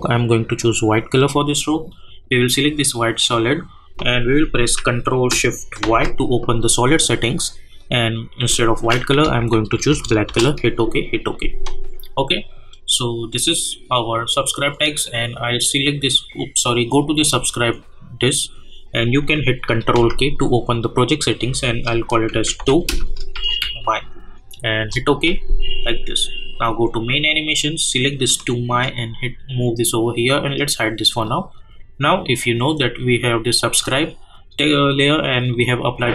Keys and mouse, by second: 5.3 click, 5.8 ctrl+shift+y, 7.7 click, 9.2 \, 9.8 Return, 10.3 Return, 11.3 click, 16.8 click, 20.4 ctrl+k, 22.3-24.1 typing, 24.8 Return, 26.8-30.3 drag, 35.5 click.